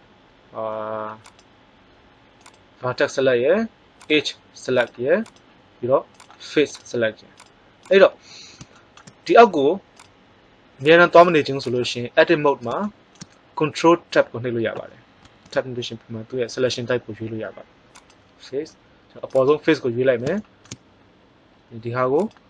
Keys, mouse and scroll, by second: 5.9 click, 9.9-11.3 drag, 12.8 middle click, 15.1 ctrl+Tab, 19.2 right click, 20.3 middle click.